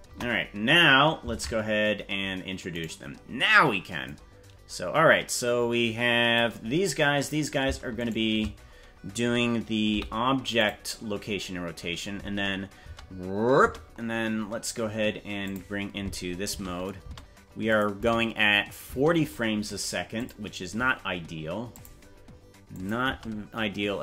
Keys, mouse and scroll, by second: 0.0 KP_0, 1.3 ctrl+Tab, 2.7 right click, 4.0-6.4 drag, 6.9 scroll down 3, 8.1 shift+right click, 9.9 i, 11.3 scroll up 3, 12.7 space, 13.7 space, 14.2-14.9 scroll up 2, 15.5 click, 16.4 space, 17.0 space, 17.7 click, 17.9 space, 18.9 space, 20.2 click, 21.7 click, 22.7 click, 23.1 space.